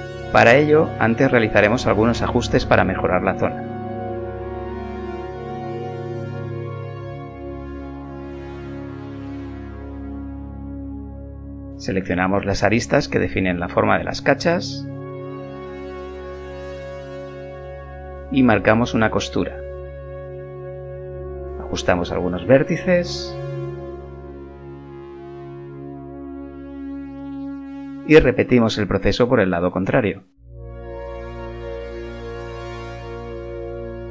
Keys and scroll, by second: 0.9 g, 1.8 g, 2.8 g, 3.8 g, 5.4 b, 7.6 g, 8.4 g, 9.7 z, 10.7 2, 16.9 KP_1, 21.1 z, 23.9 a, 25.9 g, 28.0 2, 33.1 ctrl+e.